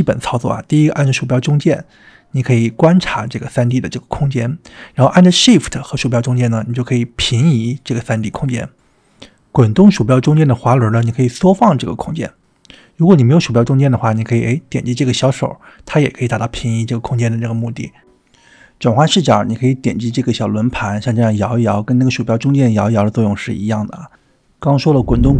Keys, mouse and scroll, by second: 1.8-7.4 middle drag, 7.7-9.2 shift+middle drag, 9.4-9.8 middle drag, 9.9-10.3 shift+middle drag, 10.6-11.1 scroll down 2, 11.1-11.5 scroll up 3, 11.5-11.9 scroll down 4, 11.9-13.1 scroll up 3, 14.8-17.6 drag, 20.9-24.8 drag.